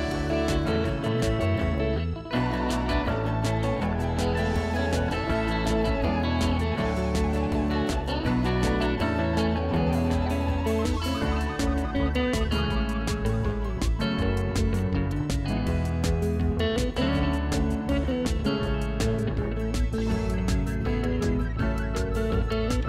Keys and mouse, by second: 2.2 click, 2.4 click, 2.7 ctrl+click, 4.4 ctrl+r, 4.7 click, 13.8 shift+click, 14.2 click.